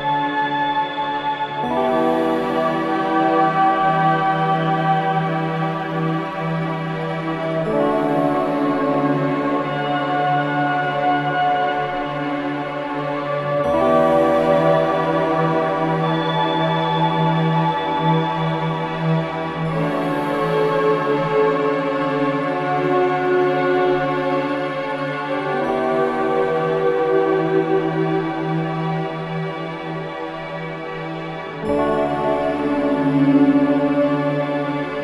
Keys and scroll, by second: 4.1 ctrl+z, 11.3 ], 13.4 ], 17.2 shift+f, 25.7 ], 26.5 ], 26.8 ], 30.4 4.